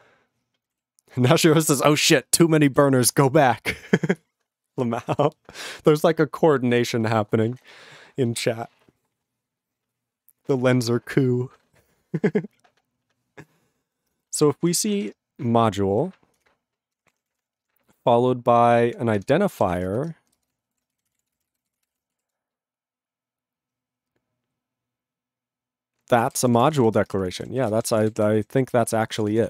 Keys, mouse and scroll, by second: 0.7 ctrl+n, 0.7 ctrl+e, 1.5 ctrl+s, 2.3 ctrl+space, 2.8 ctrl+alt+b, 3.0 ctrl+g, 3.4 ctrl+n, 3.9 ctrl+s, 13.8-22.4 typing, 16.5 Return, 26.2 ctrl+a, 26.3 ctrl+p, 26.3 ctrl+space, 26.4 ctrl+e, 26.4 ctrl+n, 26.5 ctrl+e, 26.6 ctrl+n, 26.7 ctrl+e, 26.8 ctrl+g, 27.0 ctrl+space, 27.0 ctrl+a, 27.1 ctrl+p, 27.3 ctrl+g, 27.4 ctrl+e, 27.6 ctrl+a, 27.7 ctrl+space, 27.7 ctrl+n, 28.0 ctrl+e, 28.0 ctrl+n, 28.1 ctrl+e, 28.2 ctrl+g, 28.6 ctrl+s, 28.7 ctrl+p, 29.1 ctrl+a, 29.2 ctrl+space, 29.3 ctrl+e, 29.4 ctrl+n.